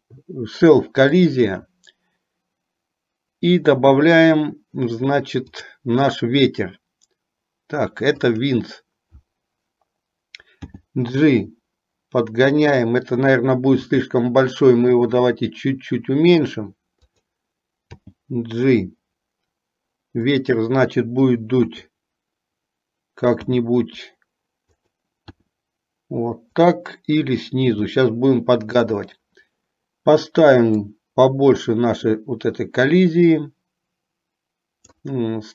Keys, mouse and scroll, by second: 5.7-8.7 drag, 21.7 KP_3, 23.6 g, 25.6 r, 27.8 g, 31.0-35.0 drag.